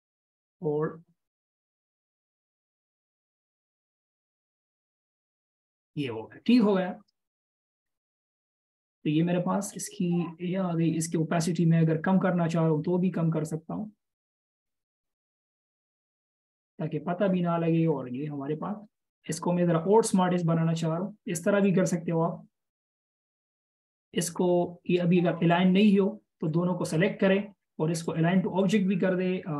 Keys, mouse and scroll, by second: 4.3 ctrl+shift+[, 4.8 ctrl+], 8.9-9.3 alt+shift+scroll down 1, 9.3-9.8 alt+shift+scroll up 1, 18.0-18.4 alt+shift+scroll up 1, 24.6-25.3 alt+shift+scroll up 1.